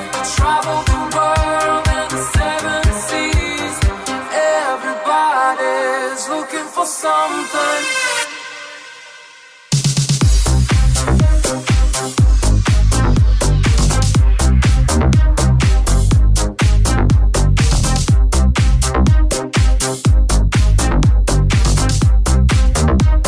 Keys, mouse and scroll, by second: 0.5 alt+z, 2.2 g, 3.8 g, 7.5 right click, 7.8 right click, 8.6 g, 9.8 middle click, 9.9 g, 10.2 Tab, 10.4 right click, 10.5-12.3 ctrl+middle drag, 12.3 right click, 12.4 middle click, 12.5 Tab, 13.3 alt+right click, 13.4-22.7 alt+middle drag, 13.8 s, 17.0 s, 18.5 Tab.